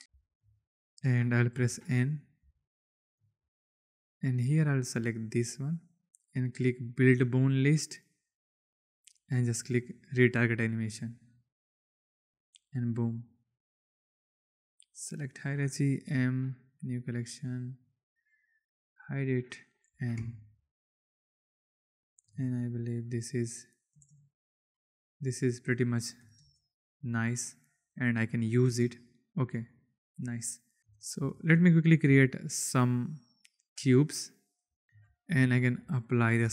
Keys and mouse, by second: 0.0 x, 0.2 shift+click, 1.6 n, 2.5-3.1 shift+drag, 4.0 click, 4.4 click, 5.5 click, 6.7 click, 10.0-11.8 drag, 13.9 click, 14.3-15.1 drag, 16.0 m, 19.0 click, 19.8 n, 20.8 click, 21.9-22.3 drag, 22.3 space, 23.9 space, 25.7-26.3 drag, 26.3 space, 28.6 space, 29.6 click, 30.8 shift+space, 31.2 shift+drag, 32.0 shift+a, 34.6 s, 34.8 shift+KP_1, 35.5 ctrl+a.